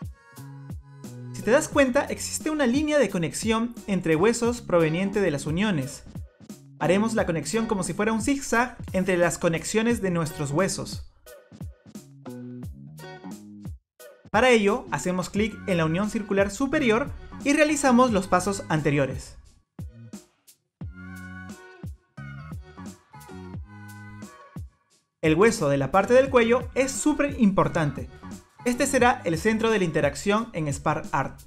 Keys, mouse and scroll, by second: 0.2 click, 0.7 middle click, 1.2 click, 1.5 click, 2.2 middle click, 3.2-3.8 scroll up 1, 4.0-4.4 scroll up 1, 6.3-6.9 scroll down 1, 7.3-8.1 scroll down 1, 8.1 click, 9.2 scroll up 2, 9.7 middle click, 13.3 middle click, 14.0-14.6 scroll down 2, 15.4 click, 17.9 click, 20.6 click, 21.3 shift+d, 22.1 click, 22.5 Delete, 22.8 middle click, 23.3 click, 23.8 click, 24.2 click, 24.8 middle click, 26.2 click, 27.7 click, 31.2 click.